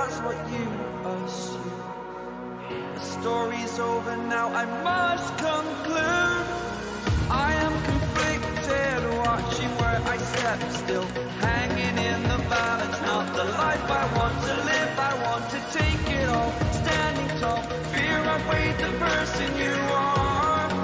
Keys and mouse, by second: 1.4 right click, 3.2 click, 4.6 ctrl+t, 6.2-8.5 drag, 8.5 right click, 10.9-16.4 drag, 16.4 ctrl+=, 18.6 click.